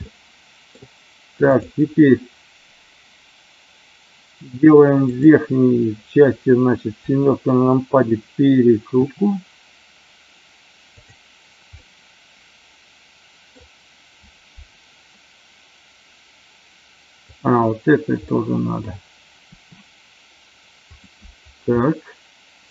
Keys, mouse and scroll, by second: 0.1 scroll up 1, 0.2-0.7 middle drag, 9.1 r, 10.9 click, 11.7-13.5 middle drag, 17.2 click, 18.2 middle click, 19.4 r, 21.8 middle click.